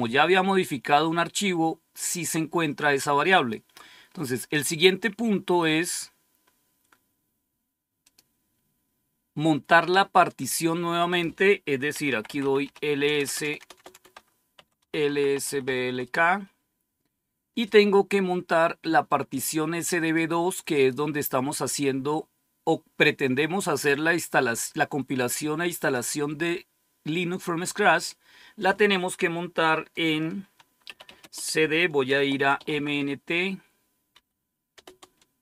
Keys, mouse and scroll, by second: 3.2 click, 4.1-4.8 scroll down 1, 5.2-5.7 scroll down 1, 5.7-7.3 scroll down 1, 7.9 click, 11.0 click, 11.7-16.0 typing, 18.9-20.1 drag, 20.6 click, 30.5-34.5 typing, 35.0 Return.